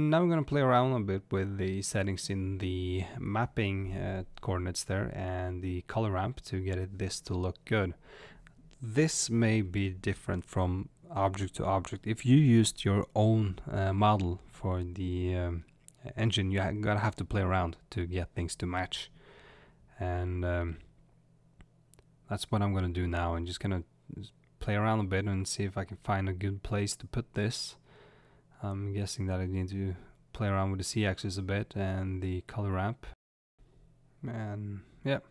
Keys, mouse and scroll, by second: 2.6-3.6 scroll down 2, 3.6-4.4 scroll down 1, 4.4 click, 5.4-35.3 drag.